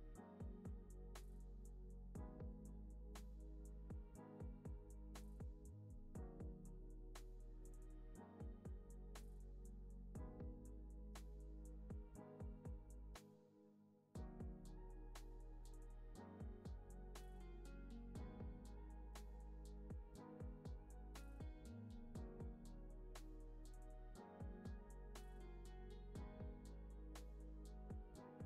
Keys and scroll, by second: 9.7 super+c, 9.9 super+v, 10.2 super+s, 17.0 alt+z, 18.1 super+c, 18.3 super+v, 19.2 alt+q, 19.8 z, 20.8 x.